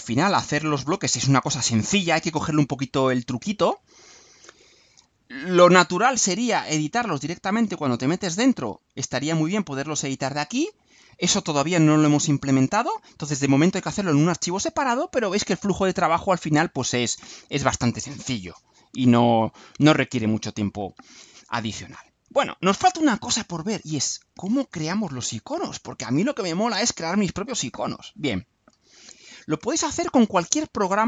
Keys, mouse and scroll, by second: 5.4 click, 8.1 click, 16.6 click, 23.9 click, 26.4 middle click, 26.8 scroll up 1, 27.6-28.9 right drag.